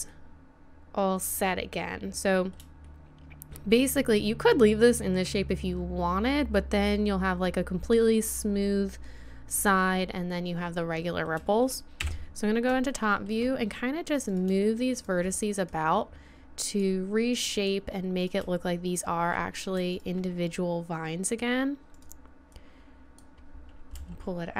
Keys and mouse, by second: 9.5-12.0 middle drag, 12.0 KP_7, 14.3 right click, 14.9-16.7 right drag, 15.7-18.2 drag, 19.4-20.5 right drag, 21.8 click, 22.3-23.4 right drag, 23.9 g.